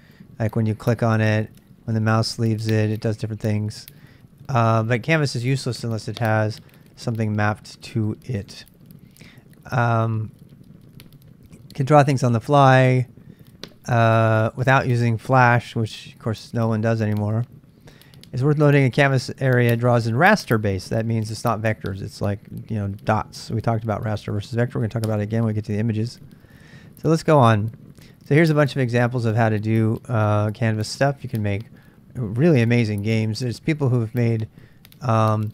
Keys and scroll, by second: 27.0-28.8 typing.